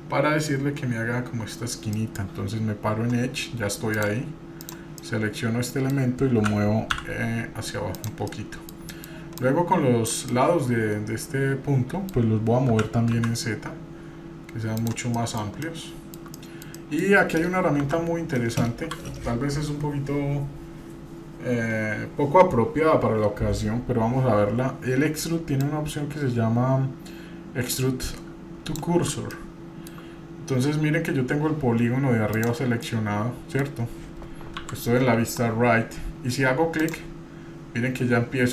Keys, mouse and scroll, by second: 2.0 middle click, 3.9 click, 4.6 click, 5.0 middle click, 6.4 g, 8.3 middle click, 8.3 scroll down 1, 8.9 middle click, 9.4 click, 10.3-12.1 middle drag, 12.7 g, 15.1 middle click, 15.5 shift+middle click, 16.3 middle click, 16.8 middle click, 17.8 KP_1, 18.8 KP_3, 25.6-28.9 drag, 29.3-30.0 shift+middle drag, 32.3 click, 32.8 middle click, 34.6 KP_3, 36.8 click.